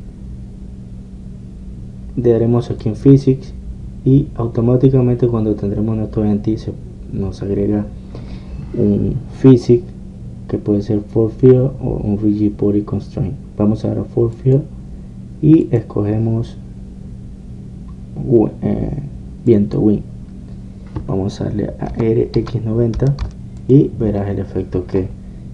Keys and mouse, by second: 3.8-5.7 drag, 15.5-25.5 drag.